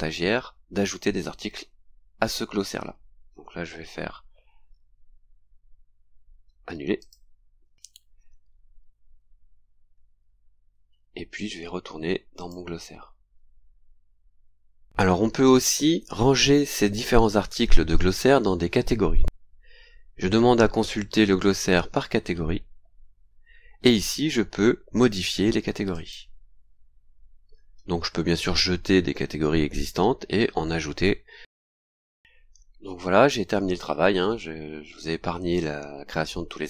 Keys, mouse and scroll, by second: 7.0 click, 7.9-9.4 scroll up 6, 10.0 scroll up 2, 10.7-11.4 scroll up 4, 12.3 click, 21.4 click, 23.0-23.4 scroll down 2, 25.9 click, 28.0 scroll down 1, 31.9 scroll down 1, 33.5 scroll down 1, 34.3 scroll down 1, 36.4-36.6 scroll down 1.